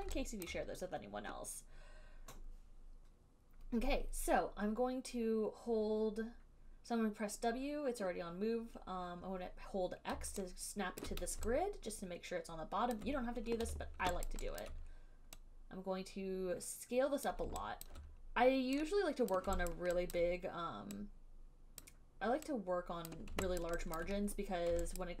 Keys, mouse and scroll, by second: 10.3-11.2 x, 11.3 click, 11.3 x, 13.1 alt+click, 13.8 r, 14.6 alt+click, 14.9 alt+click, 17.5 click, 18.1 alt+click, 19.5 click, 20.0 alt+click, 22.1 click, 23.3 click, 23.9 alt+click, 24.2 alt+click.